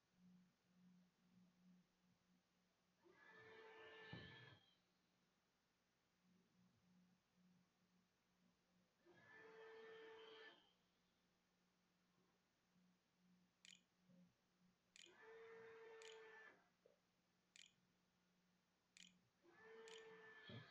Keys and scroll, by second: 4.4-5.2 typing, 12.6-20.7 typing.